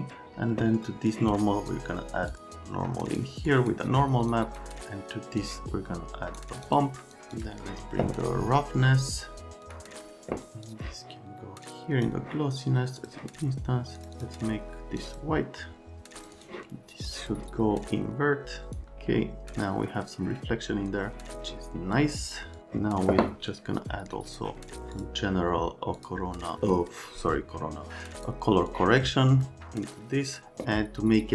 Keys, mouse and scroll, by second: 1.1 click, 4.3 click, 5.4 click, 6.7 click, 7.4 click, 13.0 click, 14.0 click, 14.2 click, 15.0 click, 16.0 click, 16.2 click, 16.4 click, 17.1 click, 18.7 click, 22.0 middle click, 28.7 click, 30.3 click.